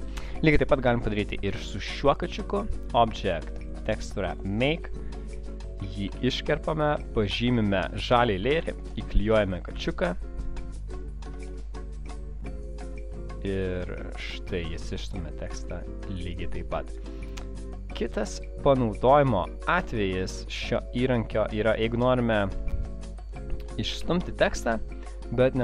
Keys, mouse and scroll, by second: 2.2 click, 2.9 click, 3.9 click, 4.7 click, 6.2 ctrl+x, 6.2 click, 7.8 click, 8.6 ctrl+v, 13.6 click, 14.4 click, 19.4 shift+click, 20.4 shift+click.